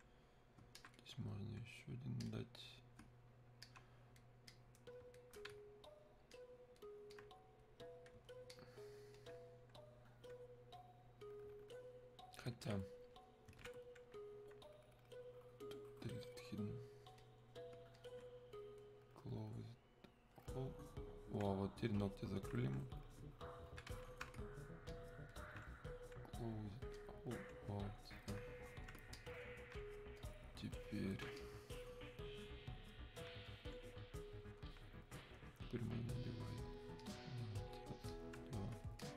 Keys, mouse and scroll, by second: 3.7 alt+click, 4.6-6.4 drag, 6.4-8.5 alt+drag, 8.5-12.4 alt+drag, 12.5-16.0 alt+drag, 16.1 click, 22.0-24.9 alt+drag, 24.9-27.0 alt+drag, 27.0 click, 28.3 alt+click, 30.2 click, 31.4-33.5 alt+drag, 33.5-37.0 drag, 39.0 alt+click.